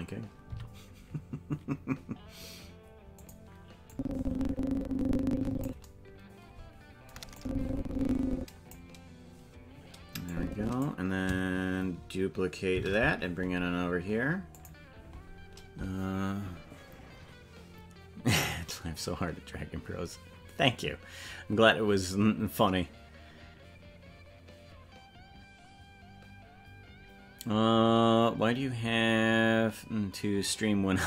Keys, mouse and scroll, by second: 0.4 g, 3.9-5.6 drag, 7.3-8.7 drag, 10.2 click, 12.7 shift+d.